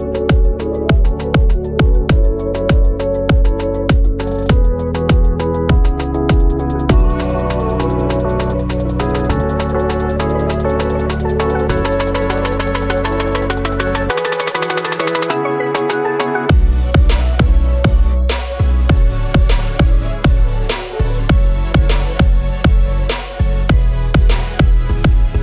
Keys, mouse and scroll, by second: 2.5 click, 3.4 click, 4.4-6.0 typing, 6.5-6.9 scroll down 2, 7.3 typing, 8.3 scroll down 2, 8.6 scroll up 2, 8.8 middle click, 9.3 typing, 11.5 click, 15.6-16.9 drag, 17.8 scroll down 2, 19.0 click, 19.9-20.3 scroll up 3, 20.9-22.4 drag, 22.7-23.0 scroll up 3, 23.1 scroll down 2, 23.4 alt+click, 24.2 scroll down 2, 24.5 alt+click, 25.3 scroll up 2.